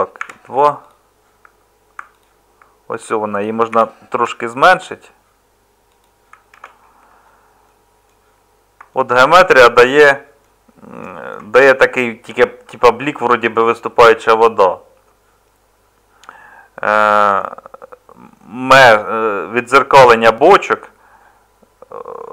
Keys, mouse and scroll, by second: 0.2 Tab, 3.7 g, 5.9 z, 6.0 z, 6.5 Tab.